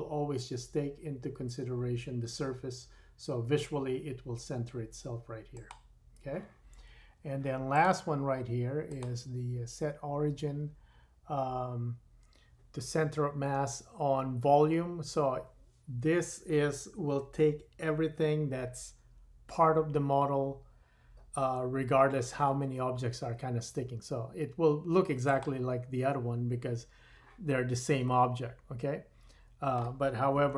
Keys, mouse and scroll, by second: 5.7-7.7 middle drag, 7.7 click, 7.9-8.8 middle drag, 8.8-11.0 drag, 28.1 middle drag, 28.5 middle click, 29.2 middle click, 29.5 middle click.